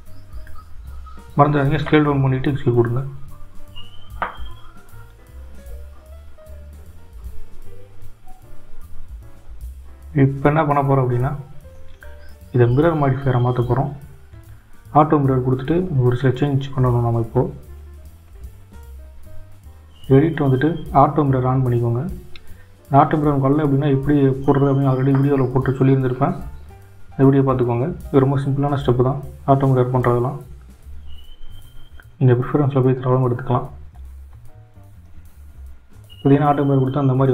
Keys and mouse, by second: 3.7 click, 4.9 click, 14.8 click, 17.7 click, 23.1 click, 27.0 Tab, 32.6 click, 33.9 click, 34.9 click, 35.2 click.